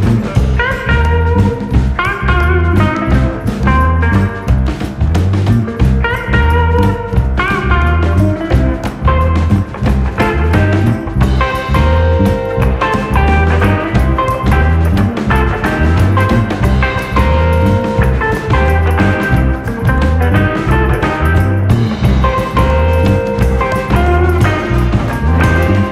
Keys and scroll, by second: 3.5 ctrl+v, 4.5 ctrl+v, 7.4 ctrl+d, 7.8 ctrl+], 8.1 ctrl+[, 9.4 u, 16.5 ctrl+v, 21.3 u, 21.9 u, 22.5-25.9 u, 25.0 alt+].